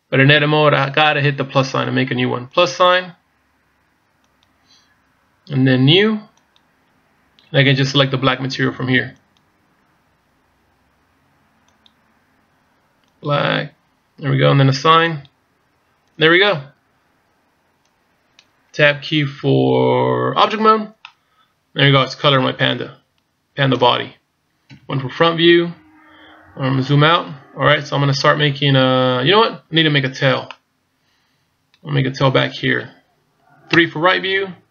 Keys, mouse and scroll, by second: 4.3 click, 6.4 click, 11.8 click, 15.3 click, 16.5 middle click, 20.5 Tab, 21.1 middle click, 24.7 KP_1, 26.4-27.5 scroll down 2, 30.5 middle click, 33.7 KP_3.